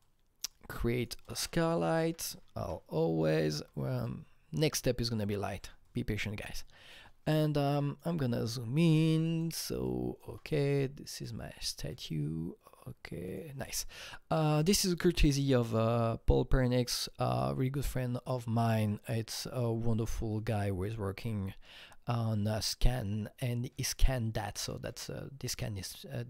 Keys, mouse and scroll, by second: 0.0 click, 0.5 double click, 1.0 click, 1.3 ctrl+space, 1.5-2.6 typing, 2.6 Down, 3.3 Return, 4.0-9.2 shift+drag, 8.8 f, 9.2 alt+click, 9.6-13.3 alt+drag, 9.6 f, 13.3-14.6 alt+drag, 14.6 click, 15.6 click, 16.7-23.3 drag, 19.1-23.3 alt+middle drag.